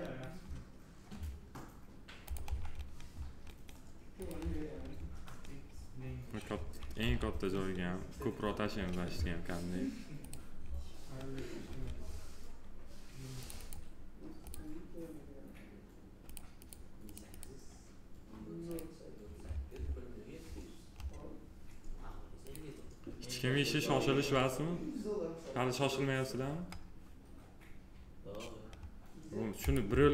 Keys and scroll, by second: 6.8 alt+r.